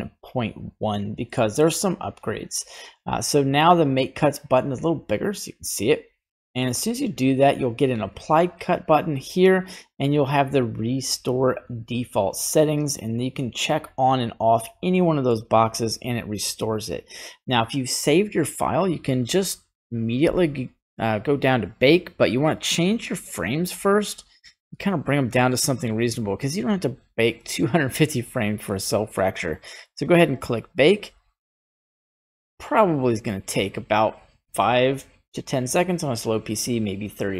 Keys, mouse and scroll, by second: 1.3 middle click, 5.3 click, 6.6 middle click, 10.5 click, 13.4 click, 13.7 click, 14.9 middle click, 17.0 scroll down 1, 18.1 scroll down 2, 22.6-25.4 drag, 29.6-37.3 drag.